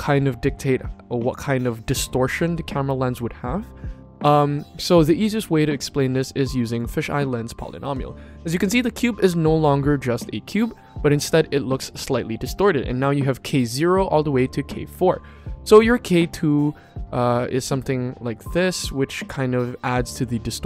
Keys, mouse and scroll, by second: 15.0-20.1 drag.